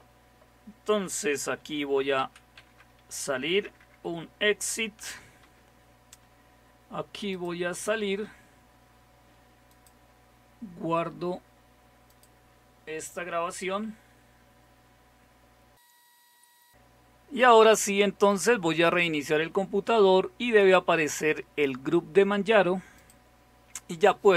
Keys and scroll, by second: 1.8-5.0 typing, 5.4 Return, 8.0 typing.